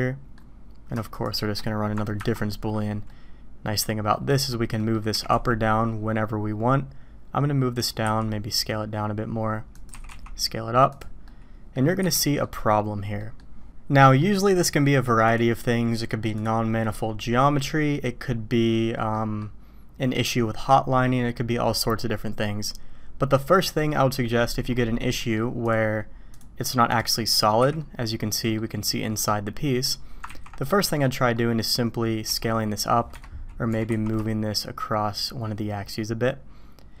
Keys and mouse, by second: 2.2 ctrl+KP_Subtract, 3.1-4.1 drag, 4.8 click, 5.1 g, 8.0 s, 9.9 s, 11.2-11.7 drag, 12.0 h, 12.2 drag, 13.2 drag, 14.0 middle click, 15.3 click, 16.4 click, 19.1 middle click, 24.3 drag, 25.2 middle click, 25.6-27.0 drag, 27.6 h, 27.8-28.6 drag, 29.1-29.8 drag, 30.2 ctrl+z, 30.6 drag, 31.3 click, 32.2 s, 33.7 g.